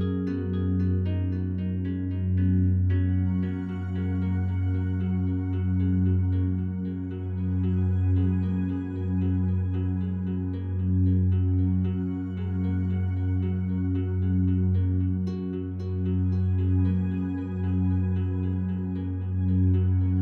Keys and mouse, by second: 0.4 click, 2.2 typing, 4.2 shift+click, 5.4-5.8 typing, 5.4 drag, 7.2 typing, 7.9-10.7 drag, 11.3 alt+drag, 11.9-12.4 ctrl+alt+drag, 12.7-13.4 drag, 13.9-16.5 drag, 17.7-18.7 drag, 19.9 click.